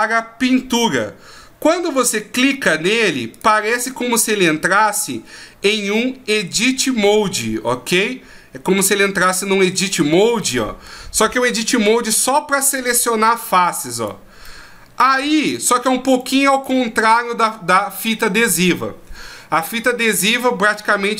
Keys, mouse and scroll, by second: 3.4 click, 10.4 middle click, 12.6 right click, 14.0 right click, 14.4 middle click, 15.4 right click, 16.0 right click, 16.5 right click, 16.9 middle click.